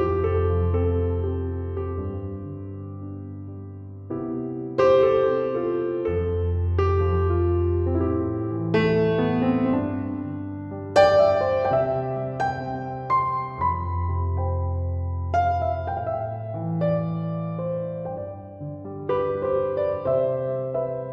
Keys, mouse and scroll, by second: 4.8 1, 5.0 0, 5.6 Return, 10.7 2, 10.9 1, 11.5 Return, 16.7 6, 17.2 ., 17.5 7, 17.7 5, 18.0 Return.